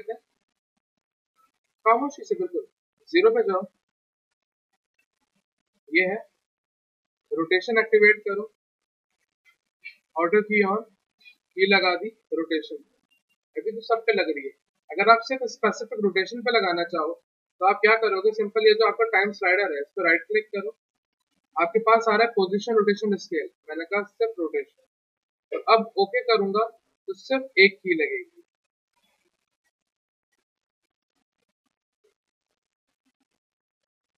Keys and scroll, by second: 5.0 z, 7.1 r, 9.0 e, 16.0 ctrl+z.